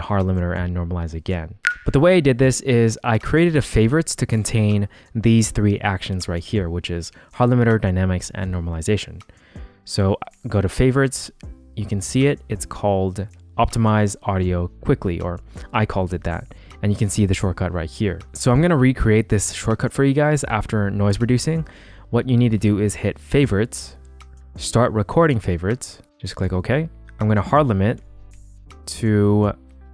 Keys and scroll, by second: 27.3 g.